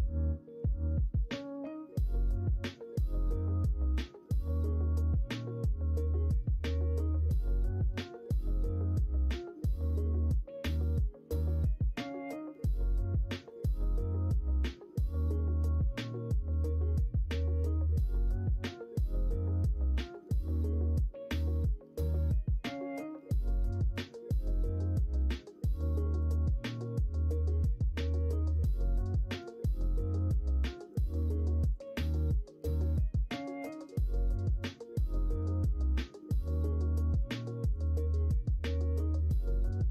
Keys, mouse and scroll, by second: 2.3 click, 3.2-7.8 drag, 10.6 click, 11.7-13.5 drag, 15.9 click, 16.9 middle click, 19.7 click, 19.9 click, 20.0 click, 24.0-27.0 drag, 28.5 click, 28.6 click, 28.8 click, 30.7 click, 31.7 click, 34.4-35.9 drag.